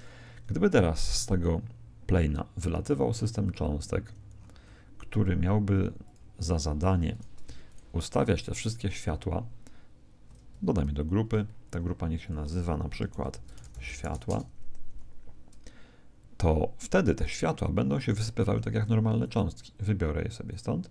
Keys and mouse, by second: 0.6 right click, 3.4 click, 6.0 click, 7.1-10.1 right drag, 11.0 ctrl+g, 12.2 click, 17.1 right click, 19.2 click.